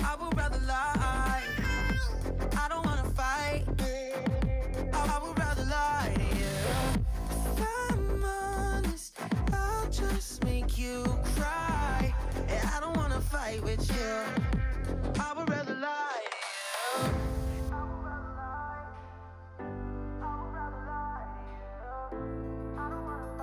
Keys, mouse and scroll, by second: 1.6 click, 1.8 scroll down 1, 2.0 middle click, 2.3 alt+z, 2.4 drag, 2.6 Tab, 2.9 click, 3.1-4.6 middle drag, 4.7 scroll down 5, 4.8 shift+middle click, 5.4 scroll up 5, 5.6-6.4 middle drag, 6.4-7.0 scroll down 5, 6.6-6.9 middle drag, 7.0-7.4 shift+middle drag, 7.4 click, 7.6 click, 8.1 middle click, 8.2 scroll up 2, 8.4-9.1 middle drag, 9.1 KP_3, 9.4 shift+middle click, 9.5 scroll up 2, 9.7 shift+middle drag, 9.9 drag, 10.1 shift+middle click, 10.3 scroll up 2, 10.5 Tab, 10.9 alt+z, 11.1 alt+z, 11.2 alt+z, 11.5 drag, 12.3 shift+middle click, 12.5-13.2 scroll up 3, 12.6 shift+middle click, 13.2 drag, 14.1 shift+s, 14.6 Tab, 15.0-15.7 right drag, 15.7 shift+middle drag, 16.0 scroll down 2, 16.1 shift+middle drag, 16.3 scroll up 1, 16.4-17.0 middle drag, 17.0 KP_3, 17.4-17.7 shift+middle drag, 17.7 click, 18.0 Tab, 18.4 click, 20.0 click, 21.4 shift+s, 22.1 Tab, 22.2-23.2 right drag, 23.2 Tab.